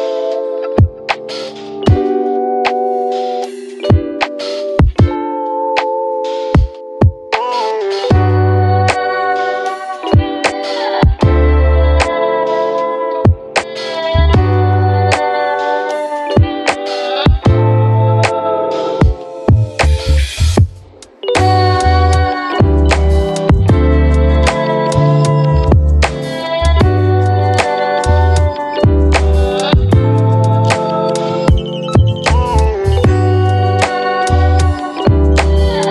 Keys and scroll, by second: 10.8 7, 10.9 Return, 16.9 3, 17.0 Return, 19.9 Return, 26.9 ,, 27.7 BackSpace, 27.8 2, 27.9 Return, 30.5 space, 33.7-35.1 typing.